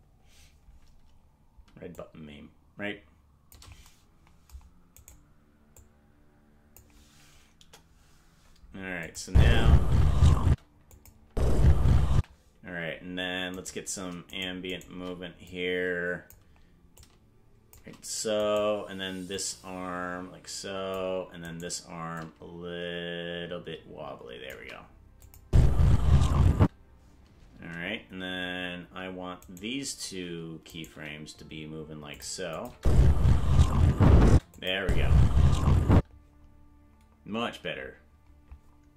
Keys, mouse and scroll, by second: 1.9-3.6 shift+drag, 5.0 right click, 5.7-6.8 drag, 7.6 KP_0, 9.1-10.2 drag, 9.2 space, 10.3 space, 10.8 KP_0, 10.9 click, 11.2 KP_0, 11.2 space, 12.6 space, 13.6 right click, 14.4 shift+right click, 14.8 right click, 15.5 click, 16.9 shift+click, 17.4 shift+right click, 18.5 right click, 19.3-21.0 drag, 21.6 right click, 22.1-24.6 shift+drag, 25.2 click, 25.4 space, 26.7 space, 29.5 shift+right click, 30.7 right click, 30.9 g, 32.6 click, 32.7 space, 34.3 space, 34.6 click, 34.8 space, 35.9 space.